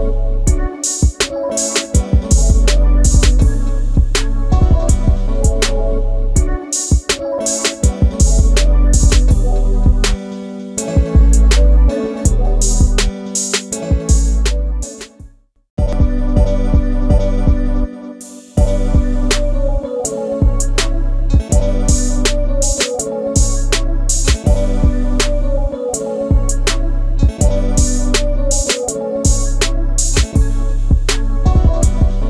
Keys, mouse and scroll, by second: 0.8 click, 1.5 space, 2.6 m, 3.4 Escape, 4.6 space, 7.9 s, 13.7 ctrl+g, 14.2 space, 15.0 ctrl+shift+g, 16.1 ctrl+a, 16.8 ctrl+shift+g, 17.3 space, 17.4 Escape, 21.2 click, 27.2 middle click, 28.0 m, 29.5 shift+middle click, 30.7 click, 31.0 middle click, 31.1 shift+double middle click, 31.9 space.